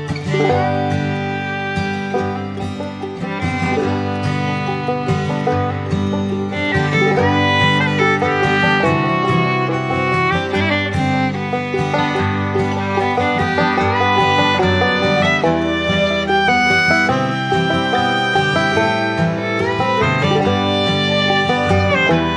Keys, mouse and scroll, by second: 0.5 shift+click, 3.3 ctrl+z, 9.1 ctrl+z, 11.8 ctrl+z, 13.1 ctrl+click, 15.1 ctrl+z, 16.6 ctrl+z.